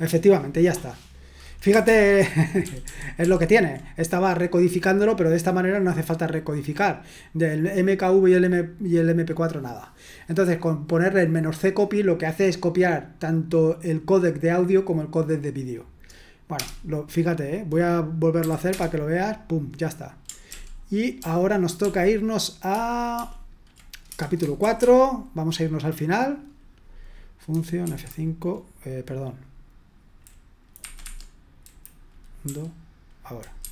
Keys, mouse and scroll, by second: 2.8 ctrl+p, 3.2 ctrl+p, 16.5 Return, 18.4 y, 18.6 Return, 20.5 ctrl+p, 21.2 ctrl+p, 21.8 ctrl+p, 22.7 ctrl+p, 23.2 ctrl+p, 24.6 Return, 27.5 Delete, 27.8 5, 30.8 Escape, 31.0 Escape, 32.4 u, 33.6 F5.